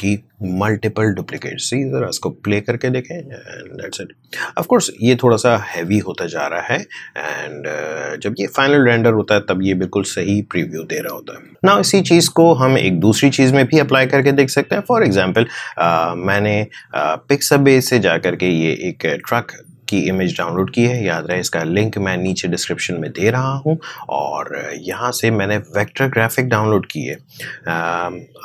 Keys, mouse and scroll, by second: 1.2 space, 16.5 alt+Tab, 17.8 alt+click, 22.2 click.